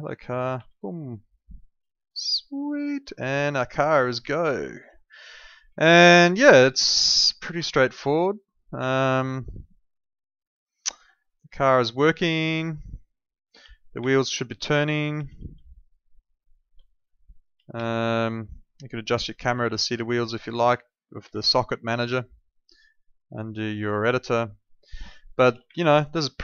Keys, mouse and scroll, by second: 0.5 e, 1.7 w, 2.2 d, 3.1 d, 4.8 w, 5.6 a, 6.4 d, 8.8 a, 11.4-12.4 typing, 13.6-16.1 typing, 17.7 e, 19.0 w, 19.4 a, 20.0 w, 21.3-22.5 typing, 24.7-26.1 typing.